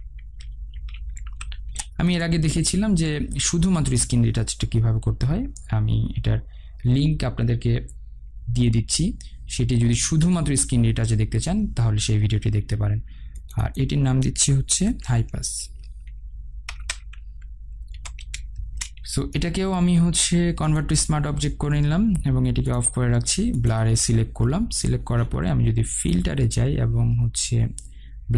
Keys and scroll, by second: 2.1 Return, 18.3 Return.